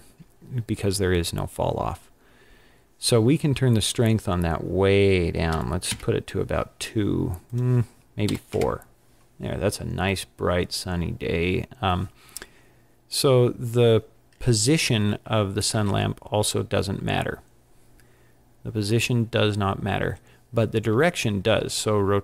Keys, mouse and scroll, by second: 3.8 click, 5.9 click, 7.5 click, 15.8 g, 21.7 r.